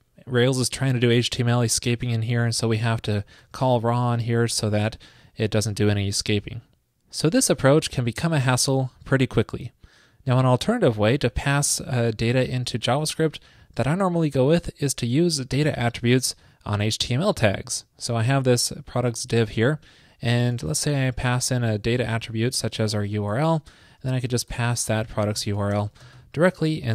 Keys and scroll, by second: 3.5 alt+shift+Left, 5.9 super+Right, 6.1 super+s, 24.6 ctrl+shift+>.